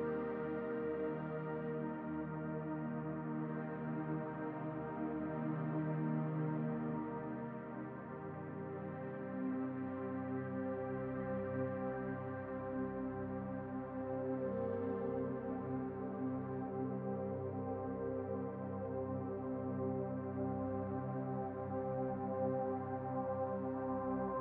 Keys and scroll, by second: 13.9 ctrl+z, 22.0 ctrl+z.